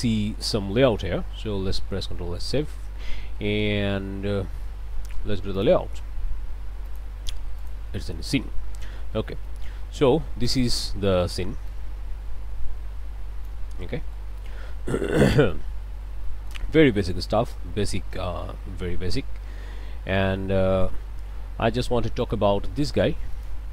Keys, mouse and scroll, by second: 2.1 ctrl+s, 5.5 click, 6.9 click, 7.6 click, 9.0 click, 9.7-10.2 scroll down 1, 10.4 click, 11.7-13.7 drag, 13.9 middle click, 15.2 middle click, 15.7 scroll down 2, 16.2 middle click, 16.7 scroll down 2, 18.2-19.4 middle drag, 19.5-20.2 scroll up 2, 20.4 middle click, 21.0-21.8 scroll up 2, 21.9 middle click, 22.6 shift+middle click, 23.3 shift+click.